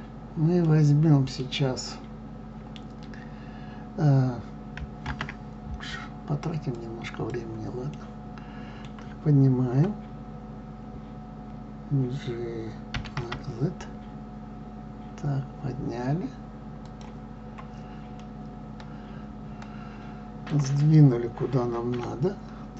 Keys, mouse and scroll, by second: 0.6-7.2 middle drag, 7.2 shift+a, 8.0-12.9 middle drag, 12.9 g, 18.3-22.7 middle drag.